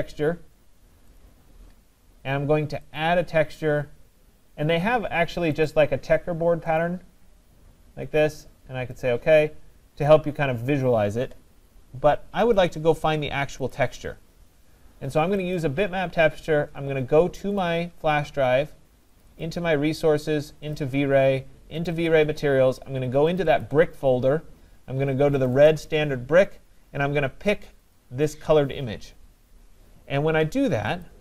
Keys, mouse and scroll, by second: 1.3 click, 3.0 click, 5.7 click, 6.8 click, 9.1 click, 12.6 click, 13.7 click, 15.6 click, 17.6 click, 19.2 click, 19.4 click, 20.8 click, 21.0 click, 21.9 click, 22.1 click, 23.4 click, 23.7 click, 25.5 click, 25.7 click, 28.0 click, 31.0 click.